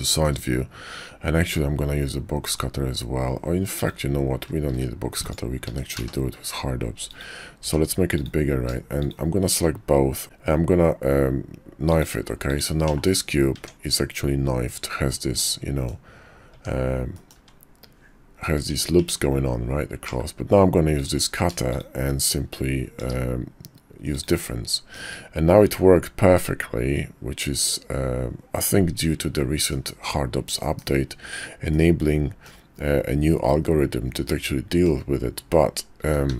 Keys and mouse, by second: 0.0 shift+drag, 3.8 click, 4.7 shift+d, 5.6 s, 7.6 s, 9.0 shift+click, 10.2 q, 12.5 click, 12.9 /, 13.6 Tab, 15.4 click, 16.5 Tab, 17.1 click, 17.4 `, 18.6 Tab, 18.9 Tab, 20.1 /, 21.0 click, 23.0 q, 24.9-29.7 drag, 30.5 KP_5, 31.7-32.5 drag, 33.5-34.9 drag, 36.0 s.